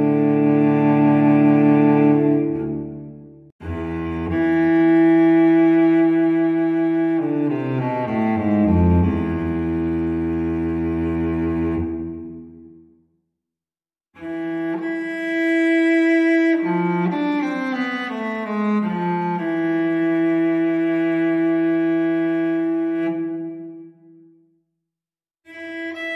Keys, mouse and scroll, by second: 3.4 click, 4.8 click, 6.5 click, 7.1 click, 7.7 click, 8.9 1, 9.4 5, 10.0 click, 11.1 click, 12.0 click, 13.1-13.9 drag, 14.9 2, 15.5 5, 16.9 click, 18.3 0, 19.9 click, 20.4 click, 21.2 click, 23.5 click, 24.7 1, 25.0 4, 25.6 0.